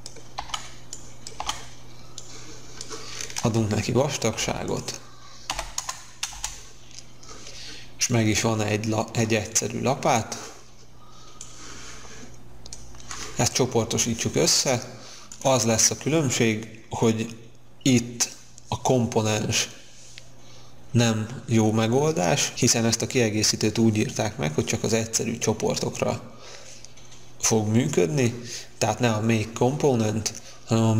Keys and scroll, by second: 4.3 p, 5.4 1, 5.7 Return, 6.3 space.